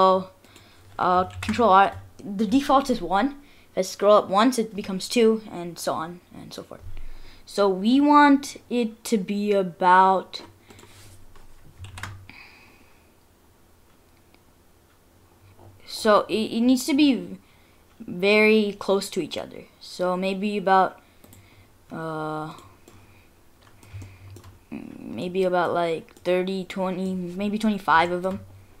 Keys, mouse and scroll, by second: 1.3 ctrl+r, 11.1-11.6 scroll up 1, 11.6 scroll up 2, 11.9 ctrl+r, 22.8 scroll down 1, 22.9 middle click, 24.0 shift+middle click, 24.7 scroll down 2, 25.2 middle click, 26.2-26.7 scroll up 2, 26.7 middle click, 27.1 scroll down 1, 27.5-27.9 scroll up 2, 28.1 shift+middle click, 28.3 shift+scroll up 1, 28.5-28.8 scroll down 1.